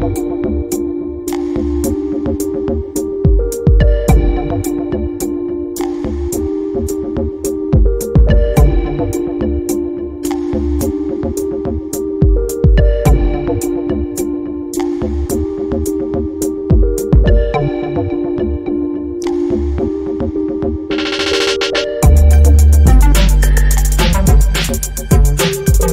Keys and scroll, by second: 24.5 ctrl+t.